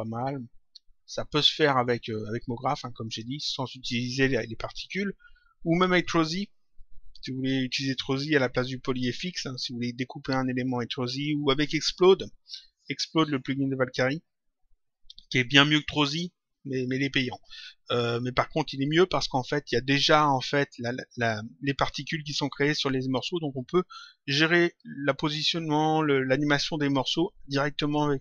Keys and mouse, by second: 3.0 click.